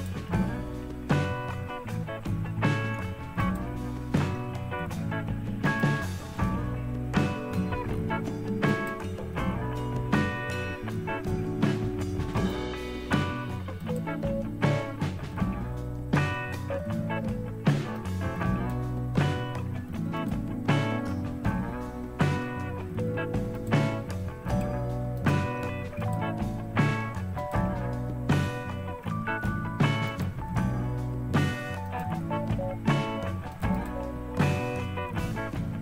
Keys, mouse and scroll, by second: 3.4 click, 5.6 click, 8.7 click, 12.5 click, 13.8 click, 18.0 click, 20.2 click, 23.6 click, 24.5 click, 25.2 click, 26.0 click, 27.4 click, 30.1 click, 31.9 click, 33.6 click, 33.8 click.